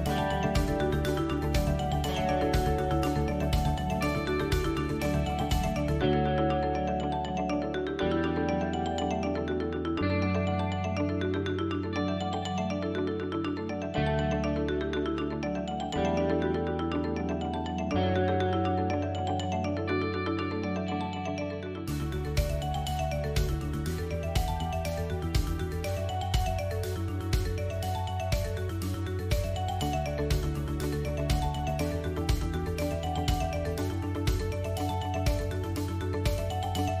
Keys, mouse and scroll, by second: 0.2 middle click, 1.2-2.0 scroll up 2, 2.0 click, 2.6 Tab, 2.9 middle click, 3.5-4.1 scroll up 3, 4.5 middle click, 6.7-7.2 scroll up 1, 7.2-7.6 scroll down 2, 7.9 Tab, 7.9-8.7 scroll down 1, 9.4 click, 11.2 Tab, 11.8 middle click, 12.9 scroll down 1, 13.7 click, 14.8 l, 15.9 h, 17.6 l, 18.4 h, 19.3 middle click, 20.7 click, 20.9 l, 21.6 l, 22.6 alt+n, 23.8 middle click, 24.7 middle click, 25.4 click, 25.7 middle click, 26.4 shift+click, 28.1 x, 29.9 scroll up 3, 30.2 shift+middle click, 32.0 2, 32.4 alt+click, 32.9 middle click, 33.7-34.0 scroll up 5, 34.1 shift+middle click, 35.8 alt+shift+click.